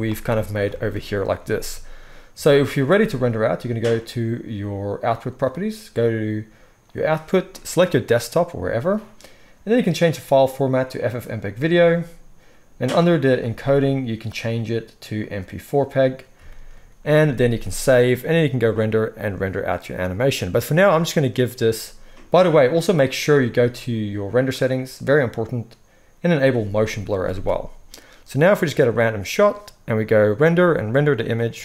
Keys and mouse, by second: 0.0-5.0 middle drag, 1.5 ctrl+s, 5.0 click, 5.1-6.8 middle drag, 6.8-23.2 drag, 17.5 ctrl+s, 23.2-26.2 middle drag, 26.2 click, 26.3-28.3 ctrl+middle drag, 27.2 ctrl+s, 27.4 ctrl+s, 28.3-31.6 drag.